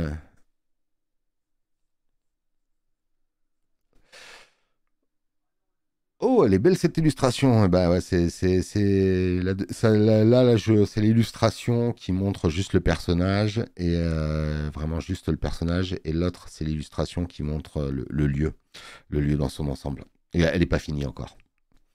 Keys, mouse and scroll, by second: 12.5 click, 12.5 space, 21.1 space, 21.4 click.